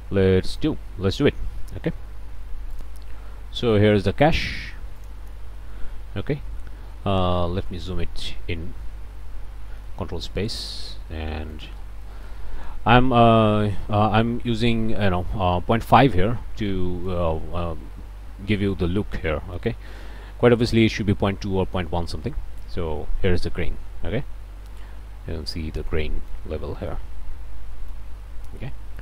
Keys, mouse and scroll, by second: 2.8 click, 3.4 click, 5.0 click, 7.7 space, 8.7 shift+space, 9.9 ctrl+shift+space, 10.5-11.3 ctrl+scroll up 3, 11.3 middle click, 11.7 scroll down 2, 12.1 middle click, 12.5 scroll down 2, 12.6 scroll up 2, 13.6 ctrl+space, 14.5 middle click, 16.7 middle click, 17.2 ctrl+space, 17.7 ctrl+middle click, 18.0-19.0 scroll up 2, 19.5 space, 24.7-25.3 scroll up 2, 25.3-25.9 scroll up 1, 25.9 middle click, 26.9 click, 26.9 middle click, 27.1-28.1 drag, 28.6-29.0 scroll down 1.